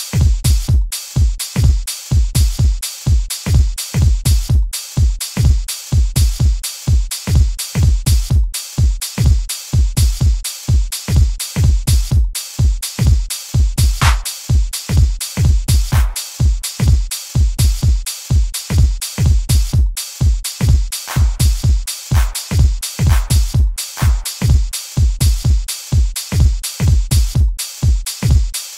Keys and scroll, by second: 21.0 s.